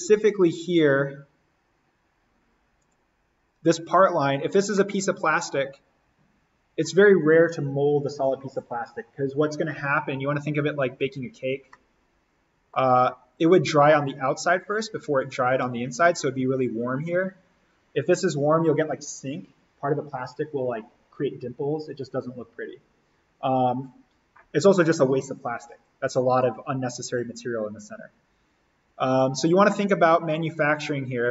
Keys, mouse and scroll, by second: 2.8 click, 4.0-4.7 scroll down 1, 4.7-10.1 middle drag, 11.7-14.6 middle drag, 14.6 click, 29.7-31.2 middle drag, 31.2 click.